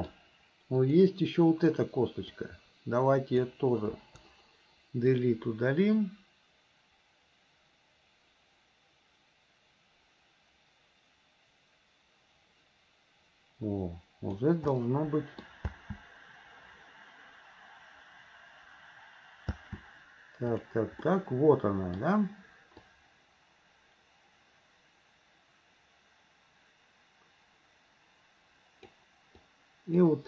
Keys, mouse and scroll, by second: 0.8 click, 2.4-3.4 drag, 4.0 Delete, 5.2-14.4 drag, 14.8 middle click, 15.7 space, 19.5 space, 20.5 click, 21.1-22.1 middle drag, 22.9-29.0 drag, 29.4-30.1 drag.